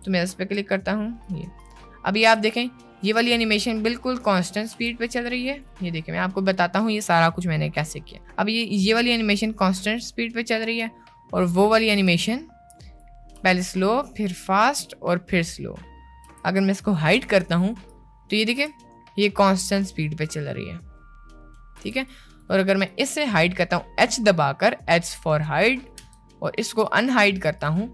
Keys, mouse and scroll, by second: 0.0 a, 0.6 t, 2.3 space, 4.9 space, 5.4 click, 6.2-6.6 middle drag, 7.6-8.0 middle drag, 8.2 middle click, 8.6 space, 12.2 space, 12.8 click, 13.4 space, 16.4 space, 16.9-17.3 drag, 18.1-18.5 drag, 18.7 space, 21.9 space, 22.2 drag, 22.9 click, 26.0 h, 26.9 click, 27.6 click.